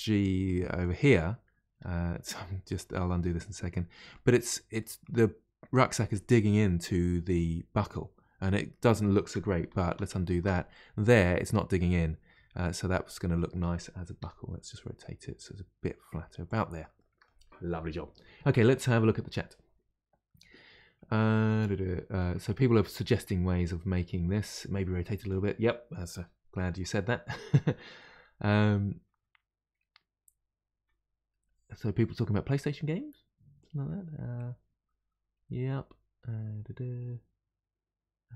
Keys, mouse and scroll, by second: 3.0-7.9 middle drag, 9.8 ctrl+z, 10.1 ctrl+z, 10.7-12.6 middle drag, 12.6-13.3 scroll down 2, 13.3 middle click, 14.2 r, 17.0-20.0 middle drag.